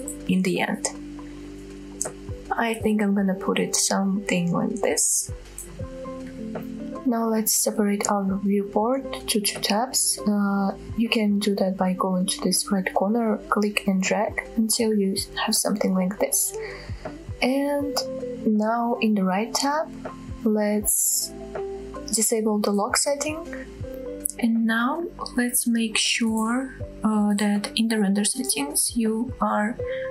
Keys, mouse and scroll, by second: 0.8 shift+middle click, 1.8 middle click, 3.5 shift+middle click, 10.1-12.4 drag, 12.6-13.2 scroll up 2, 15.0 n, 15.8 t, 17.1 scroll up 1, 17.6 scroll down 1, 18.0-18.4 scroll up 1, 20.6 scroll down 1, 21.5-22.2 scroll down 1, 23.0 click, 23.7-24.1 drag, 24.1-24.6 scroll down 2, 24.6-25.0 middle drag, 25.1-25.6 scroll up 5, 25.7-27.6 shift+scroll down 3, 26.0 click, 26.0 middle click, 27.6 click.